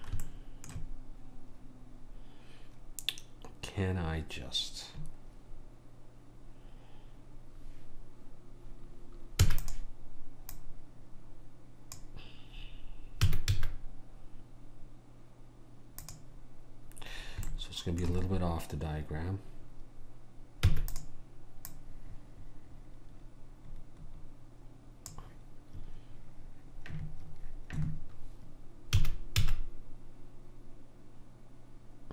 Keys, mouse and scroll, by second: 9.4 e, 10.6 click, 13.3 s, 17.6-20.7 middle drag, 20.7 e, 21.7 click, 29.0 s.